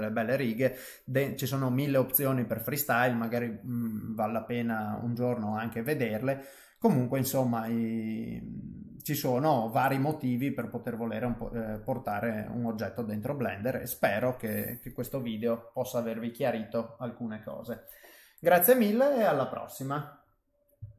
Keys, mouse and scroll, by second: 15.7 middle click.